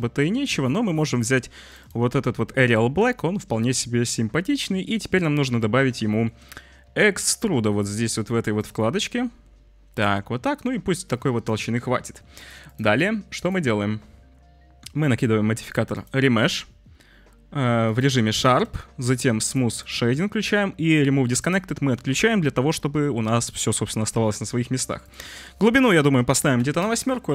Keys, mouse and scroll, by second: 2.3-4.0 drag, 6.1 shift+click, 6.9-8.5 shift+drag, 8.7-11.0 drag, 11.5 drag, 12.3 click, 12.6 click, 13.4-16.0 drag, 16.4 click, 17.8 click, 19.4 click, 19.7 click, 21.3 click, 22.8 middle drag, 25.1-27.3 drag.